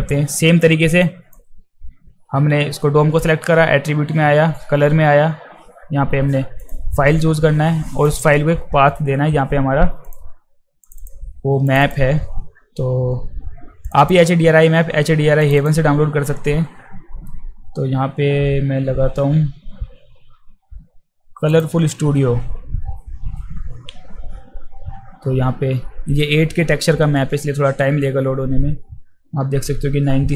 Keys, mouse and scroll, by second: 1.0 click, 6.6 click, 8.1 click, 10.0 click, 10.8 click, 11.0 click, 11.7 click, 11.8 click, 13.8 click, 14.0 click, 15.4 click, 15.6 click, 21.5 click.